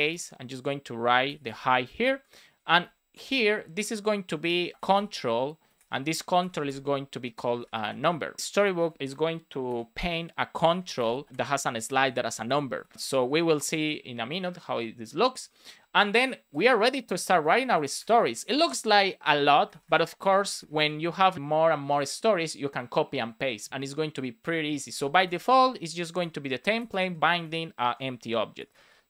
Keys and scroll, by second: 1.8 Up, 2.0 Right, 2.4 Up, 2.7 shift+super+Right, 3.7 shift+p, 4.3 Delete, 4.5 shift+[, 4.7 space, 6.2-7.3 typing, 9.6 shift+[, 10.6 space, 11.3 shift+space, 12.7 super+s, 12.9 Up, 13.5 super+s, 16.9 Return, 17.4 Return, 18.1 space, 19.1 space, 19.8 space, 20.2 shift+d, 24.3 space, 25.1 shift+t, 26.1 Return, 27.0-28.8 typing.